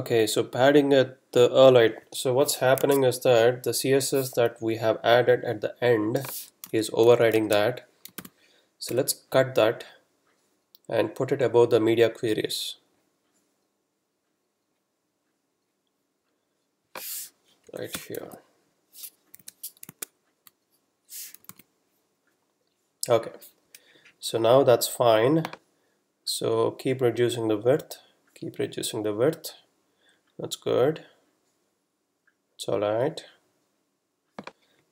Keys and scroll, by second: 2.9 super+Tab, 4.6 super+Down, 7.1 super+Left, 7.5 shift+super+Down, 17.7 Down, 17.9 Return, 18.7 super+v, 19.3 super+v, 19.4 super+s, 19.9 super+Tab, 21.5 super+r, 23.7 F12.